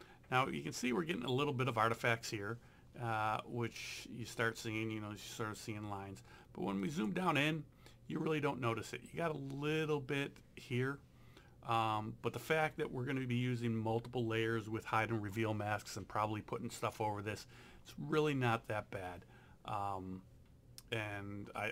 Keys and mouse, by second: 6.8 click.